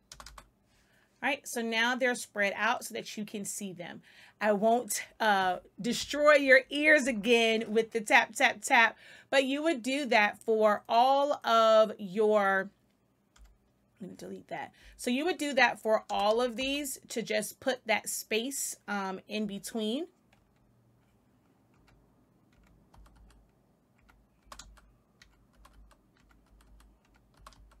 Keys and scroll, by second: 0.0 space, 13.3 Delete, 16.0 space, 19.3 Left, 21.7 Right, 22.8 space, 23.9 Right, 24.3 space, 25.1 Right, 25.5-27.8 typing, 26.1 Right, 26.9 Right.